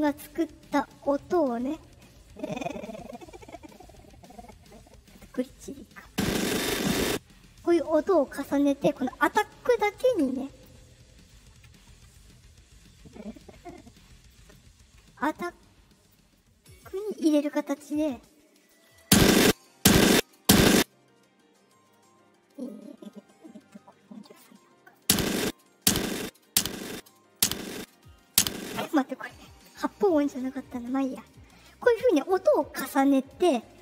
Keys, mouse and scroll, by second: 1.1 click, 5.0 click, 5.9-7.0 drag, 7.6 click, 13.2 click, 15.2 click, 16.3 click, 18.5 click, 19.0-20.6 typing, 22.5 click, 24.3 click, 24.9-28.6 typing, 25.4-26.9 drag, 27.3 click, 28.8 right click.